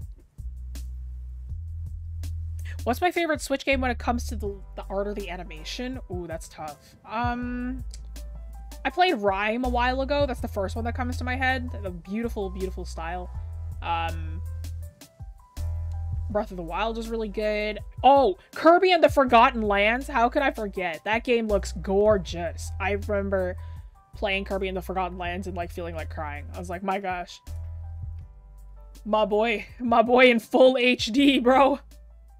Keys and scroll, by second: 27.5-28.8 scroll down 1, 29.2-30.4 scroll up 1.